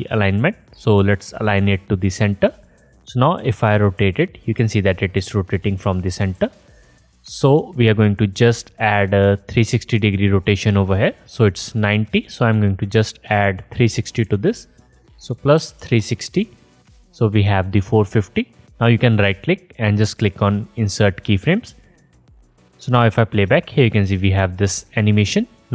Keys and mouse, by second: 0.5-10.3 drag, 6.3 ctrl+z, 10.3-12.5 middle drag, 12.5-23.5 drag, 19.2-23.2 middle drag, 19.2-23.2 right drag, 23.5 space.